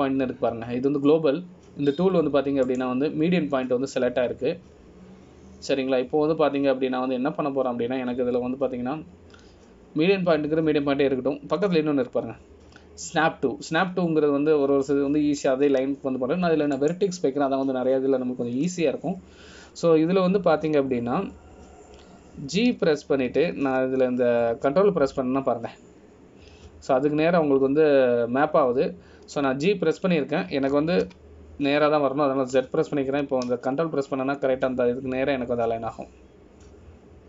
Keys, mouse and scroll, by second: 4.8 click, 25.3 g.